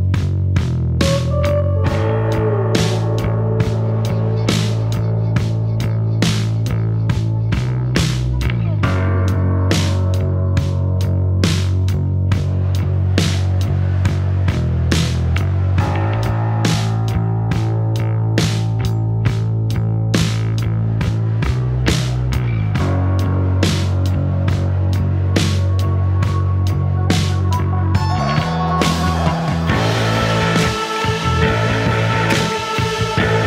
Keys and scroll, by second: 0.5 ], 1.9-2.9 typing, 10.8 3, 11.4 ctrl+f, 11.5 Escape, 12.0 Escape, 12.6 ctrl+z, 12.8 ctrl+d, 12.9 Escape, 19.6 ], 24.3-26.9 typing, 32.1 F9.